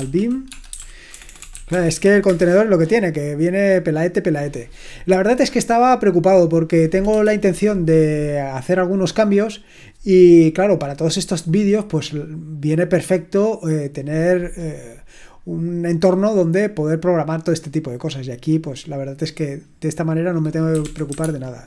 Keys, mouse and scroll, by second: 0.0-2.4 typing, 20.4-21.5 typing.